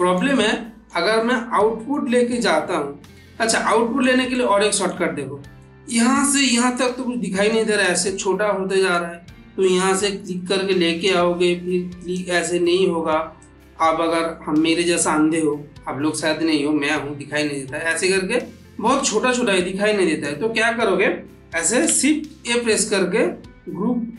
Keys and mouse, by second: 3.0-4.0 middle drag, 6.9 ctrl+middle click, 7.7 ctrl+space, 8.6 middle click, 10.1-11.1 drag, 11.9 click, 13.3-20.1 drag, 21.7 click, 22.3 shift+a.